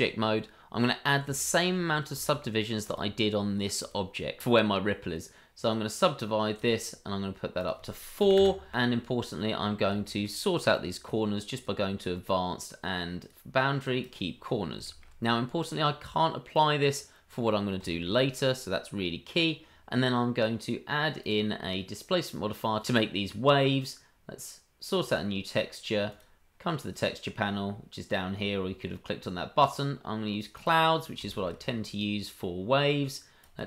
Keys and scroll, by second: 8.4 KP_3, 10.3 KP_3.